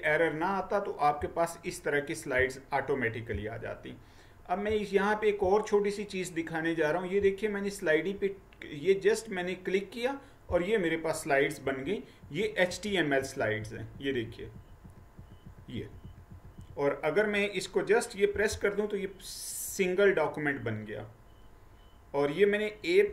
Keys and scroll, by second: 11.7 Right, 12.3 Right, 12.8 Right, 13.3 Right, 13.7 Right, 14.0 Right, 14.4 Right, 14.6 Right, 14.9 Right, 15.6 Right, 15.8 Right, 16.1 Right, 16.4 Right, 16.6 Right, 18.5 a, 20.1-23.0 Down.